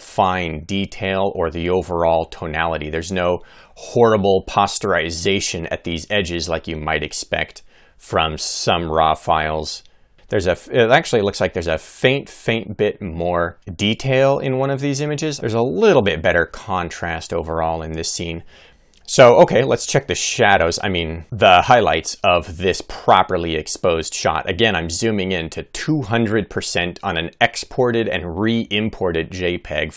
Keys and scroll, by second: 14.8 Right, 15.3 Left, 15.9 Right, 16.4 Left.